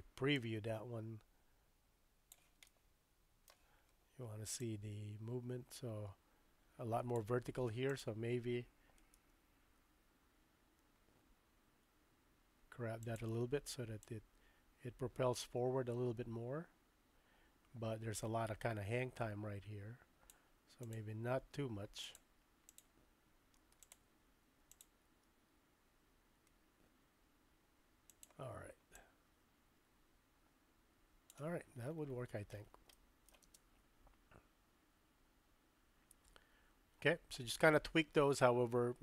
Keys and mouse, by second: 0.4-2.3 drag, 2.6-4.5 shift+middle drag, 4.6-7.3 drag, 7.9 click, 9.2 g, 14.0-20.3 drag, 20.8 click, 22.0 click, 22.7 click, 23.8 click, 23.9 typing, 24.7 click, 25.1 g, 28.9-31.4 drag, 32.9-33.3 shift+middle drag, 33.5 space.